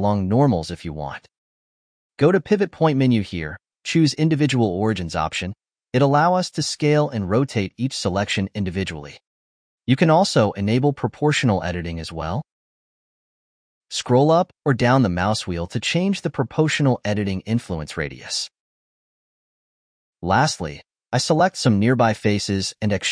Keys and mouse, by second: 0.0 s, 1.3 s, 1.7 ctrl+z, 3.5-6.1 drag, 6.3 s, 7.7 r, 10.9-12.0 drag, 12.0 s, 20.8 click, 21.5 shift+click, 21.8 shift+click, 22.3 shift+click, 23.0 e.